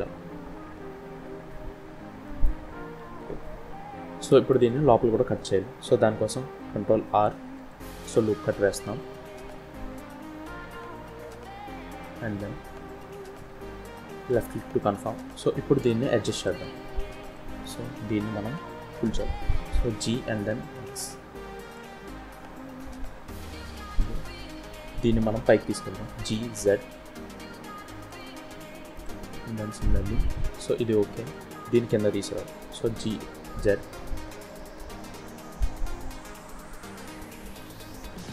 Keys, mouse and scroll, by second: 2.7 scroll down 2, 3.6 scroll down 1, 4.2 shift+middle click, 5.0-5.9 scroll down 5, 7.5 ctrl+r, 15.1-15.7 scroll up 3, 15.7 shift+middle click, 17.2 click, 19.3 g, 22.0-22.4 scroll down 2, 22.6-23.4 scroll up 2, 23.4-23.9 scroll down 1, 23.9 click, 25.9 g, 28.6 shift+middle click, 29.1-30.1 scroll up 2, 30.1 click, 31.2 click, 32.7 g, 34.9 click, 35.7 g, 37.3 click, 37.6 g.